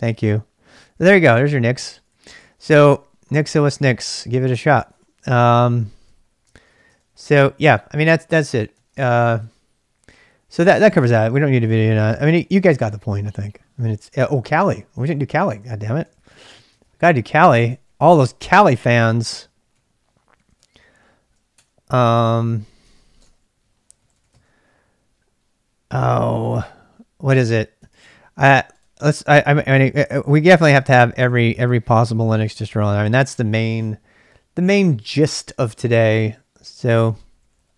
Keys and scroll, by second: 0.7-14.9 typing, 1.9 ctrl+a, 2.1 ctrl+a, 8.8 ctrl+[, 12.1 ctrl+[, 16.0 ctrl+a, 16.2 ctrl+a, 16.7 ctrl+[, 16.8-21.5 typing, 21.5 Return, 22.8-24.7 typing, 27.9 super+Tab, 29.3 super+Tab, 29.7 super+Tab, 30.4 super+Tab, 30.6 super+Tab, 30.9 super+Tab, 31.2 super+Tab, 31.4 super+Tab, 33.8 Return, 33.8 super+Tab, 33.8 typing, 36.5-37.7 typing.